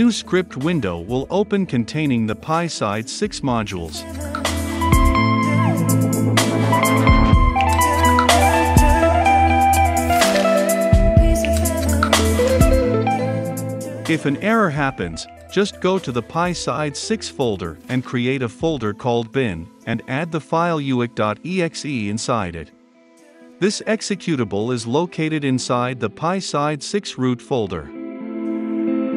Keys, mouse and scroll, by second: 0.0-11.9 drag, 11.9-13.5 right drag, 13.5-22.7 drag, 22.7-23.8 middle drag, 23.8 click, 24.2 u, 25.1-26.2 drag, 26.4 ctrl+c, 26.8 right click, 27.7 click, 28.1 middle click, 28.9-29.1 drag.